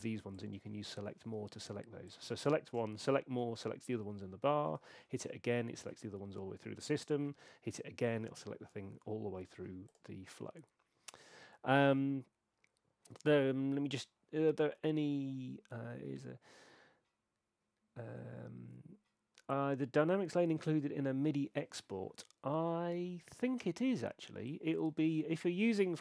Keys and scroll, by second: 2.9 shift+super+a, 4.9 shift+super+a.